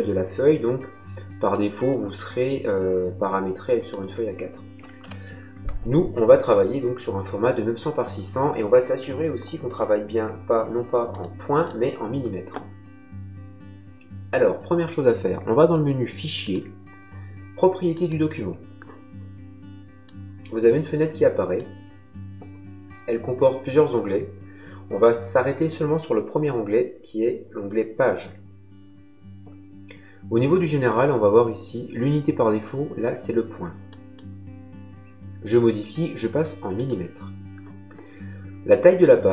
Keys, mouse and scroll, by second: 1.5 click, 4.9 Delete, 11.0 click, 16.3 click, 17.9 click, 20.0 click, 33.8 click, 36.7 click.